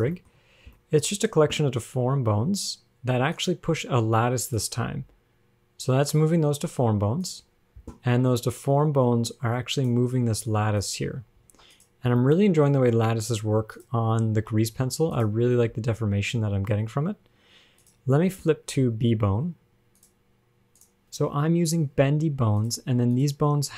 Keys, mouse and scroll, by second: 0.5-2.4 shift+scroll up 7, 1.0 shift+middle click, 2.8 shift+click, 3.6 shift+click, 4.8 click, 5.2 g, 9.7 click, 10.4-11.0 scroll up 3, 11.0 click, 11.7 ctrl+Tab, 12.0 click, 12.4 shift+middle click, 14.0 click, 14.6 ctrl+Tab, 15.0 g, 15.4 click, 15.9 g, 19.1-20.3 scroll down 11, 20.3 click, 21.0 g, 23.4 click.